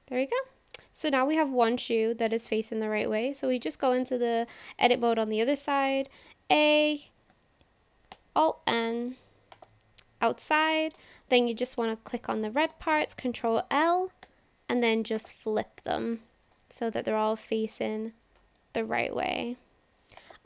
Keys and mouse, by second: 1.7 Tab, 2.2 click, 2.7 shift+click, 4.4 Tab, 4.9 shift+click, 5.9 a, 8.1 alt+n, 11.0 click, 11.4 click, 11.8 click, 12.7 ctrl+l, 14.2 alt+n, 16.6 click, 18.9 ctrl+l, 19.5 alt+n.